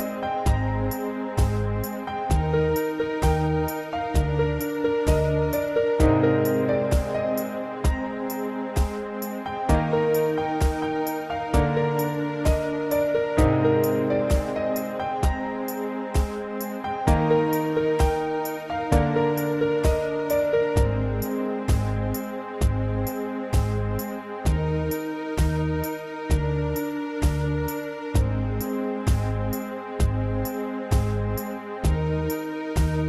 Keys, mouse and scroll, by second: 2.5 middle click, 4.1 scroll up 2, 4.7 7, 5.5 shift+middle click, 10.3 typing, 10.9 click, 12.6 typing, 14.5 y, 16.6 click, 17.0 scroll down 2, 17.2 shift+middle click, 17.6 middle click, 19.9 shift+middle click, 20.9 shift+middle click, 21.3 ctrl+z, 22.3 scroll up 2, 22.6 shift+middle click, 23.0 middle click, 23.7 scroll up 1, 24.2 a, 24.5 middle click, 26.2 click, 27.2 click, 28.5 1, 29.0 scroll down 3, 29.3 shift+middle click, 29.7-30.1 scroll down 1, 30.1 shift+middle click, 31.4 6.